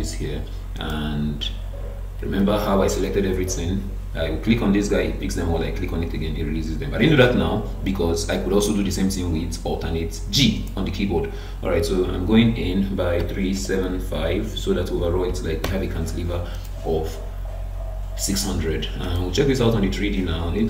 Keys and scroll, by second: 2.4 alt+g, 14.6 BackSpace.